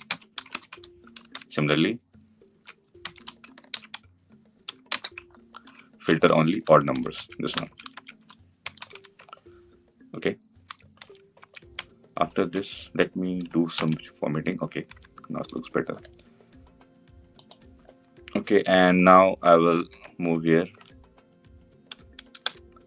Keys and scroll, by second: 3.4 ctrl+c, 5.4 ctrl+v, 13.6 ctrl+alt+l.